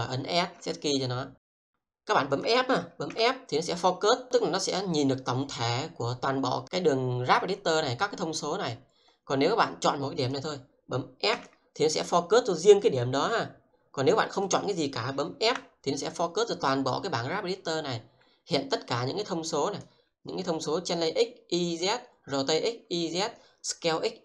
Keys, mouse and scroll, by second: 0.6 s, 1.6 click, 2.8 f, 9.9 click, 11.1 f, 12.5 click, 15.3 f, 19.5 click.